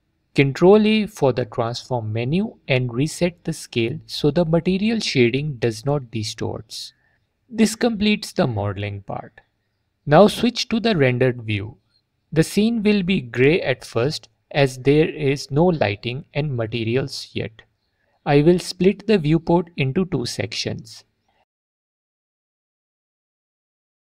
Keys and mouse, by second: 0.1 ctrl+middle click, 0.4 middle click, 0.9 ctrl+a, 3.7 click, 10.8 z, 21.5 click.